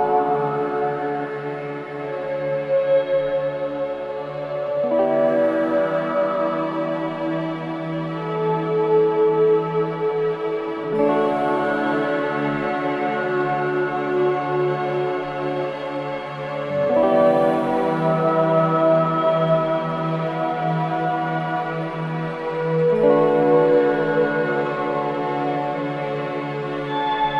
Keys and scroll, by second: 2.4 4, 5.1 3, 15.7 4, 16.2 3.